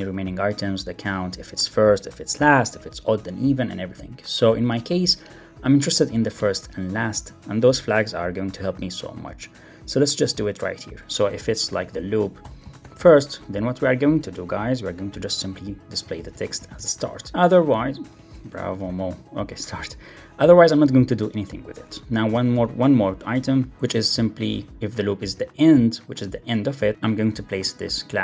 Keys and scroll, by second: 17.3 Right, 17.5 Left, 18.0 alt+Left, 18.3 alt+shift+Right, 19.3 Right, 20.6 alt+Up, 21.9 super+d, 22.1 Left, 26.1 alt+Right, 26.9 super+z, 27.8 ⟲.